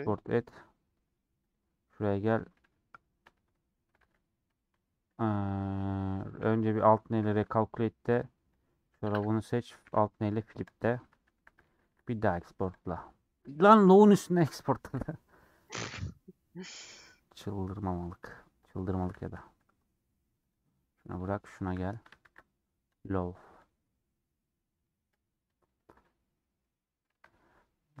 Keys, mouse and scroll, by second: 0.1-8.8 drag, 8.8 Tab, 11.8 ctrl+shift+e, 14.8 ctrl+shift+e, 18.2-22.2 drag, 22.2 ctrl+shift+e, 25.1 click, 26.0-28.0 middle drag.